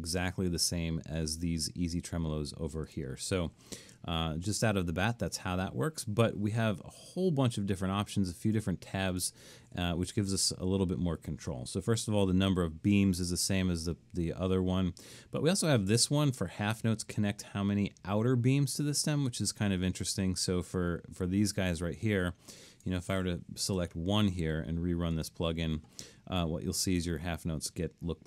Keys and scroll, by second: 23.8 1.